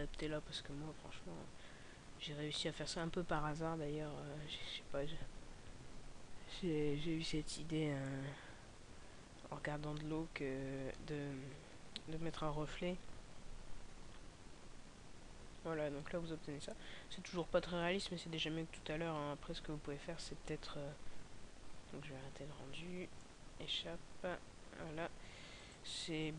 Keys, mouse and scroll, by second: 24.1 Escape.